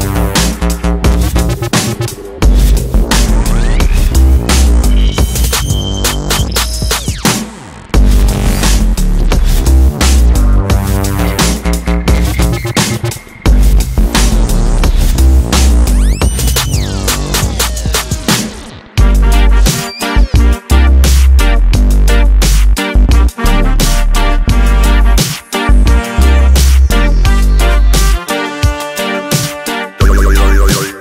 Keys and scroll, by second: 6.8 space.